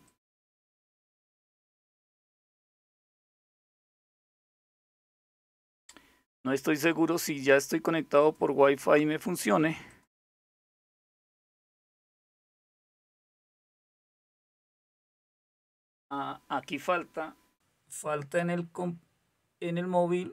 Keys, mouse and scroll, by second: 3.4 click, 4.9 click, 7.8 click, 9.5 click.